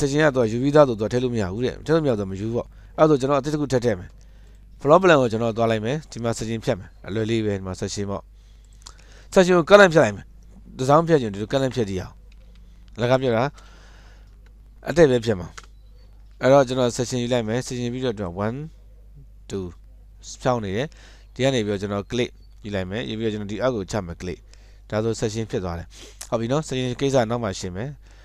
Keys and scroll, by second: 12.7 Escape, 12.8 Escape, 14.6 Delete, 15.9 Return, 21.2 Escape, 25.3 Escape, 25.4 Escape, 25.6 Escape, 25.7 Escape.